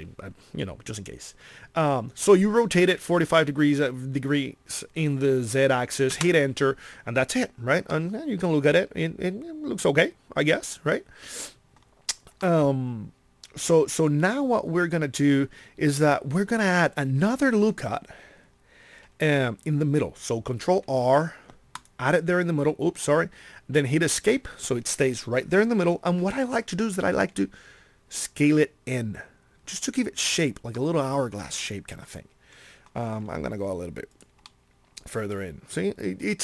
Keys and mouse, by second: 20.9 ctrl+r, 27.0 s, 33.1 s, 34.4-36.4 drag.